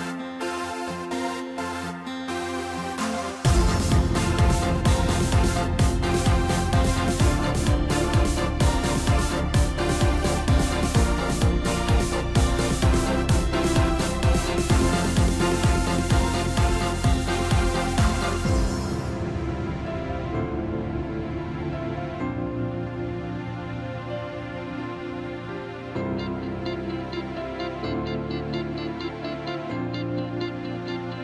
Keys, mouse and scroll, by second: 0.5 scroll down 1, 0.6 KP_3, 2.4 shift+b, 4.6 scroll down 4, 4.8-6.5 middle drag, 6.5-7.1 scroll up 3, 7.4 Tab, 8.2 click, 9.4 shift+click, 9.7-11.4 middle drag, 11.4-12.7 drag, 13.1 scroll down 2, 13.3-16.3 middle drag, 17.4-18.9 drag, 21.5-23.0 drag, 23.0 0, 25.3-25.9 scroll down 6, 26.2-27.6 middle drag, 27.6 scroll up 1, 27.9-29.4 middle drag.